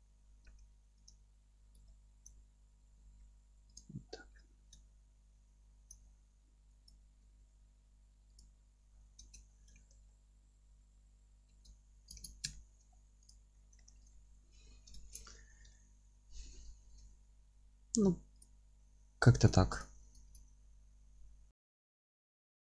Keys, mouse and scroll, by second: 1.1 click, 1.2 F3, 1.6 scroll up 1, 1.9-3.8 alt+middle drag, 2.3-2.9 scroll down 1, 3.0 g, 3.8 click, 4.1 scroll down 1, 4.3 F3, 4.9-6.9 alt+middle drag, 6.1-6.4 scroll up 1, 6.4 F3, 6.9-8.4 drag, 7.3 g, 8.7 F3, 8.9-9.2 scroll down 1, 9.2 Tab, 9.5-13.3 middle drag, 9.8 alt+q, 11.5 alt+q, 12.9-13.3 scroll down 1, 13.3 click, 13.6-18.4 alt+middle drag, 14.1-15.0 scroll up 1, 15.0 ctrl+space, 15.5 scroll down 1, 17.1-18.4 scroll up 1, 18.4 click, 18.7 scroll up 1, 18.9 Tab, 19.4-19.8 alt+middle drag, 19.6 3, 19.8-20.3 drag, 20.3 alt+e, 22.4 click, 22.5 scroll up 1, 22.6-22.7 alt+middle drag.